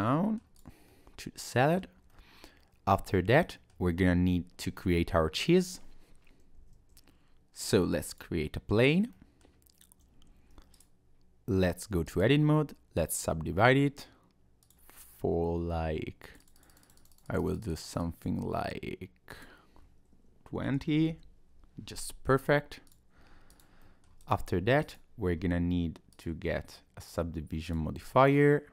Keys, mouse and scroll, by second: 0.5 click, 0.9 middle click, 2.1 middle click, 4.8 middle click, 6.3 click, 6.6 shift+a, 9.1 middle click, 10.3 Tab, 10.7 right click, 12.1 right click, 14.6 click, 16.2 click, 16.5 click, 16.6 click, 16.7 click, 16.8 click, 17.0 click, 17.1 click, 17.3 click, 17.4 click, 17.6 click, 17.7 click, 17.8 click, 18.0 click, 19.3 click, 21.7 Tab, 22.9 click, 23.2 Tab, 23.5 click, 23.8 middle click, 24.2 click, 24.8 click, 27.7 click, 28.3 middle click.